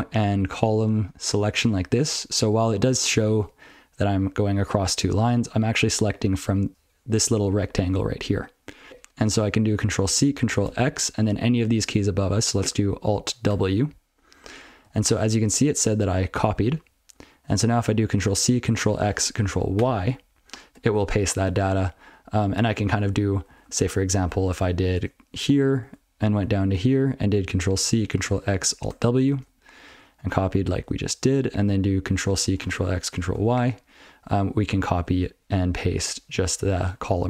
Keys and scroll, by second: 8.8 ctrl+b, 13.5 ctrl+w, 14.8 ctrl+g, 15.3 ctrl+p, 15.6 ctrl+n, 15.8 ctrl+n, 15.9 ctrl+n, 16.1 ctrl+n, 16.4 ctrl+n, 16.7 ctrl+f, 19.8 ctrl+y, 23.0 ctrl+/, 23.5 ctrl+p, 23.6 ctrl+p, 23.8 ctrl+p, 24.1 ctrl+p, 24.4 ctrl+p, 24.5 ctrl+p, 24.8 ctrl+space, 25.0-25.4 ctrl+f, 25.5 ctrl+n, 25.7 ctrl+b, 25.9-26.3 ctrl+b, 28.9 ctrl+w, 29.9 ctrl+g, 30.0 ctrl+n, 30.2 ctrl+n, 30.4 ctrl+n, 30.6 ctrl+f, 30.8 ctrl+n, 33.4 ctrl+y, 36.9-37.2 ctrl+p.